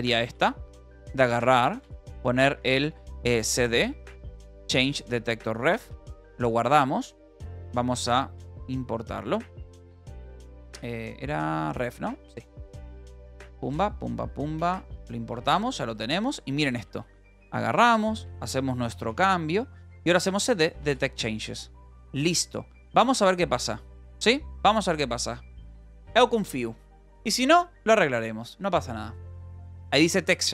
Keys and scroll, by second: 0.0-5.5 typing, 6.4 ctrl+s, 7.2 h, 7.6 v, 8.4 c.